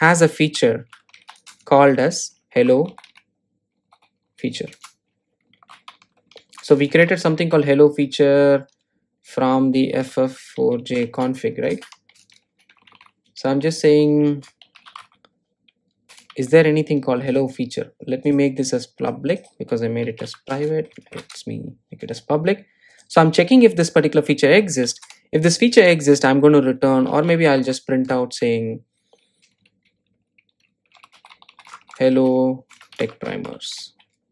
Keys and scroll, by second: 12.5 Return, 21.2 Return, 21.8 super+e, 28.3 Tab.